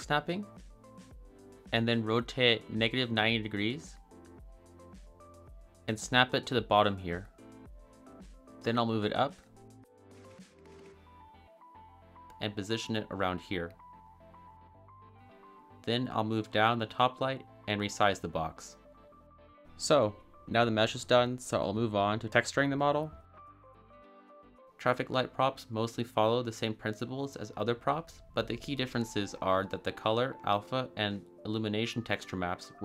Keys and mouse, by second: 1.8-3.0 typing, 3.3 Return, 4.7 g, 5.8 click, 5.9 middle drag, 6.3 shift+middle drag, 6.8 g, 8.5 x, 8.6 z, 9.7 click, 10.8 g, 11.0 z, 11.1 click, 11.7 g, 12.1 x, 12.7 click, 13.0 ctrl+z, 13.2 s, 13.6 click, 14.2 g, 14.6 ctrl+z, 14.6 ctrl+z, 15.5-18.2 typing, 16.1 click, 18.2-21.4 middle drag, 22.1 middle click, 23.1-24.1 middle drag.